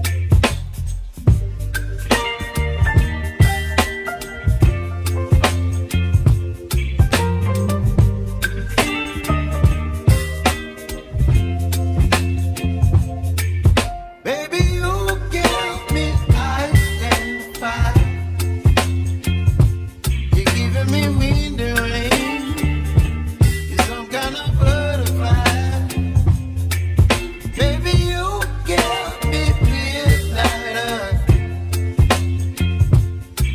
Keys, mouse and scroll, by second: 0.0 g, 3.3 click, 4.1 shift+click, 5.4 shift+click, 5.7 shift+click, 7.9 s, 11.7 click, 12.7-14.1 middle drag, 14.1-15.2 scroll down 2, 15.2-17.8 middle drag, 17.9 Tab, 19.4-20.9 drag, 20.9-21.3 scroll up 1, 21.3-22.9 scroll down 1, 22.9 shift+click, 24.3-29.1 shift+drag, 25.9-26.3 scroll up 4, 26.5-27.0 shift+middle drag, 27.0 scroll down 2, 27.5-28.1 middle drag, 28.1-33.5 right drag, 29.6 scroll down 1, 29.9-31.2 middle drag.